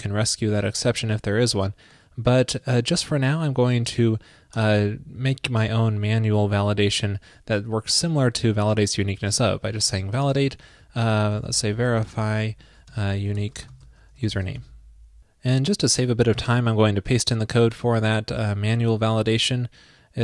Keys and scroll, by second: 18.7 super+v.